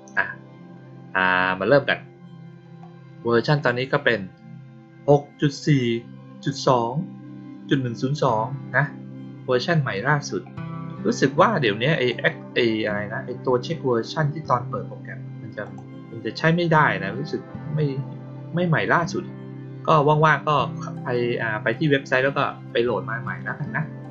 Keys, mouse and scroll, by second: 11.8 click, 15.6 click.